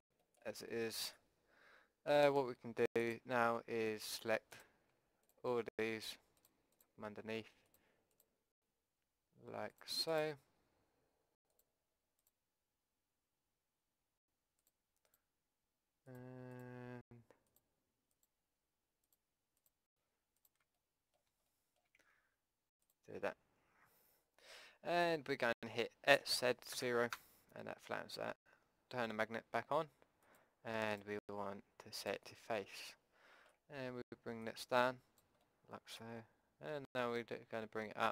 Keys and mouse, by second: 3.0-14.2 drag, 14.6-20.8 drag, 20.8 middle click, 21.1 click, 21.6 click, 22.8-24.4 drag, 24.4 middle click, 26.1 s, 30.3-32.9 drag, 32.9-34.4 middle drag, 34.4-36.1 drag, 36.1-37.5 middle drag.